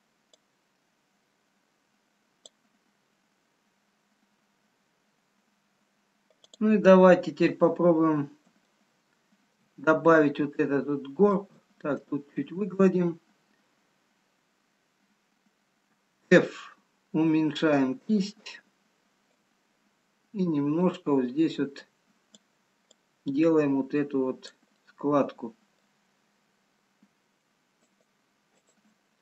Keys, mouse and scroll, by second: 0.6 click, 5.8-6.6 scroll down 2, 6.7 click, 7.5-7.8 scroll up 2, 9.4 shift+middle click, 11.6 shift+click, 19.4 click, 24.9 middle click, 26.5 scroll down 1, 28.0 shift+click.